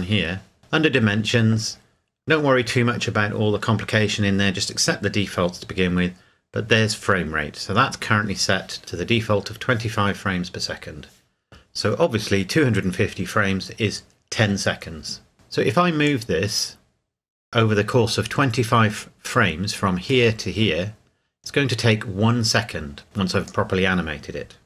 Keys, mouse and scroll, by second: 16.0 click, 20.3-20.8 drag.